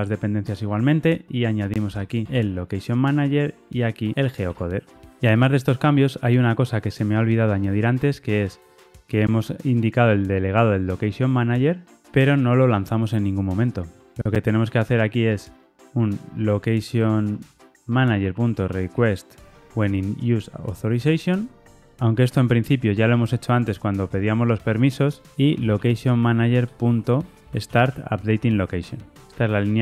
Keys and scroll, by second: 2.2 Tab, 4.4 Tab, 17.9 Return, 20.9 Return, 27.0 Return, 29.1 Return.